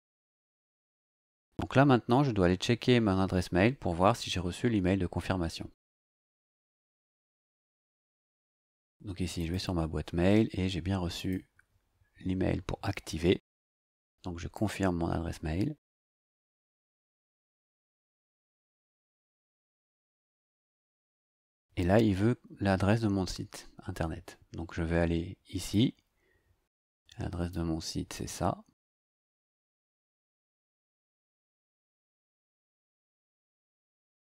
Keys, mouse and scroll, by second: 7.9 click, 9.4 click, 11.1 click, 14.5 click, 25.6 click, 26.9 click, 28.1-29.6 drag, 30.4 ctrl+c, 31.2 click, 32.2 ctrl+click, 32.6 ctrl+v, 33.5-34.2 scroll down 2.